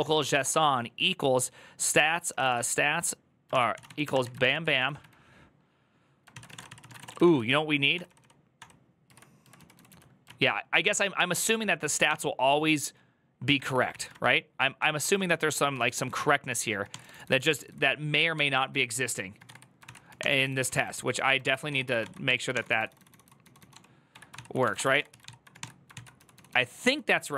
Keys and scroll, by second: 0.0-0.7 typing, 1.8-7.2 typing, 7.7 ctrl+d, 7.9 ctrl+d, 8.3 ctrl+d, 8.8 ctrl+u, 9.3-9.7 typing, 10.0 ctrl+o, 10.7-12.3 typing, 13.4 ctrl+^, 13.7 ctrl+c, 13.9 ctrl+^, 14.5 ctrl+d, 14.8 ctrl+d, 15.5 ctrl+d, 15.5-27.3 typing, 18.3 ctrl+o.